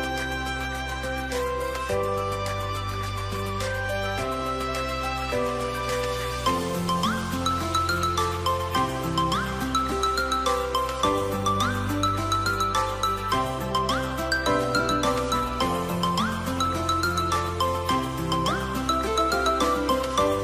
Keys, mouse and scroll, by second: 3.6 Return, 11.6-12.9 scroll up 1, 15.0-17.0 scroll down 1, 18.4-20.4 scroll up 1.